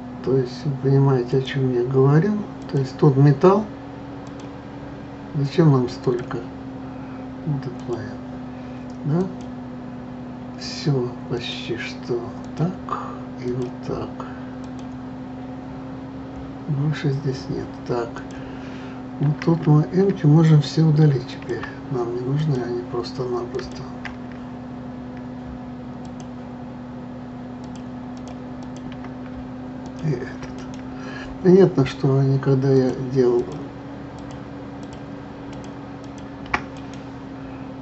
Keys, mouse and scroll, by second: 1.3 click, 2.6 click, 4.2 click, 6.0 click, 7.8 click, 9.2 click, 11.3 click, 12.4-13.6 drag, 14.6 click, 15.6-16.2 scroll down 1, 16.2 scroll down 2, 18.1 click, 21.1 a, 21.3 click, 21.6 a, 22.3 click, 23.5 click, 26.0 shift+click, 27.6 shift+click, 28.1 shift+click, 28.6 shift+click, 29.8 shift+click, 30.5-32.7 right drag, 32.7 shift+click, 33.3 shift+click, 34.1 shift+click, 34.8 shift+click, 35.5 shift+click, 36.0 shift+click, 36.7-37.8 right drag.